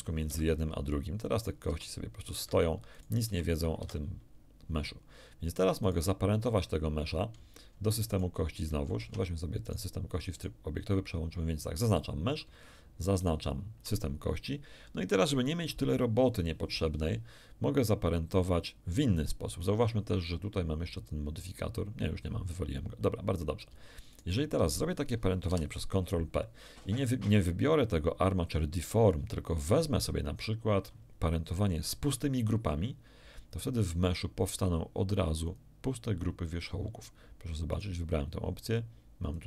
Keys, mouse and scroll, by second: 0.2 Escape, 1.3 right click, 1.6 r, 2.3 Escape, 2.9 right click, 3.2 r, 3.7 Escape, 5.8 right click, 8.1 ctrl+shift+click, 8.9 ctrl+shift+Tab, 9.6 ctrl+shift+click, 10.3 ctrl+shift+click, 11.7 click, 13.1 shift+right click, 19.5 right click, 20.9 click, 24.1 shift+right click, 25.4 ctrl+p, 35.4 click, 37.7 right click, 39.3 click.